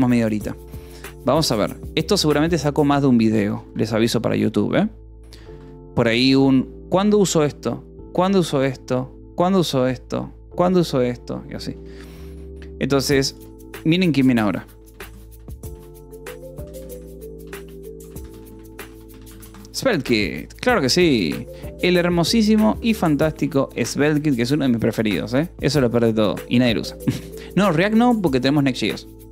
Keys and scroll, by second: 0.0-2.7 typing, 14.8-18.9 typing, 19.2 Escape, 20.0 ctrl+s, 21.3 h, 22.1 a, 22.8 BackSpace, 23.2 Escape, 24.0 o, 28.2 p.